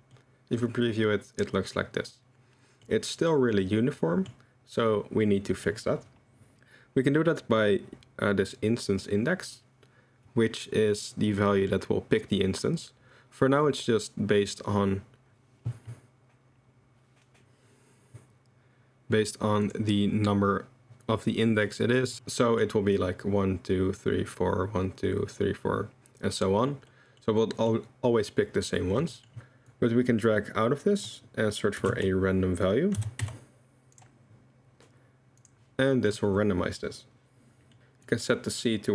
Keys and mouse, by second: 0.1-2.8 middle drag, 3.6-4.3 middle drag, 5.2-5.6 middle drag, 19.6 click, 22.4 click, 26.9 drag, 27.4 drag, 29.1 click, 29.7-35.5 drag, 35.9 drag, 37.7 click, 38.2-38.9 drag.